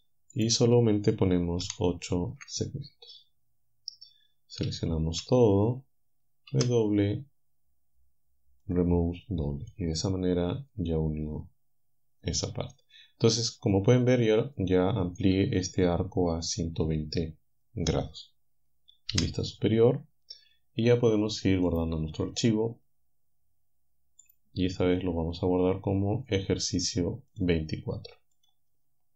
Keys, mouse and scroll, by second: 1.6 8, 2.3 Return, 4.7 a, 6.6 w, 8.7 click, 9.7-15.4 drag, 19.1 KP_7, 21.7 click, 24.3 click, 27.4 click, 28.4 click.